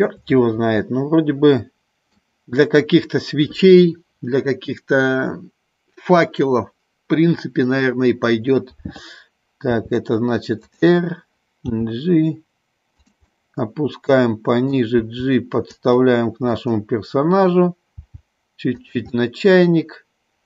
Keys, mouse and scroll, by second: 1.1-2.4 middle drag, 9.9 r, 10.9 click, 11.9 g, 13.5-15.0 middle drag, 15.2 g, 16.0 click, 16.8 middle click, 18.3 g, 19.3-20.4 middle drag.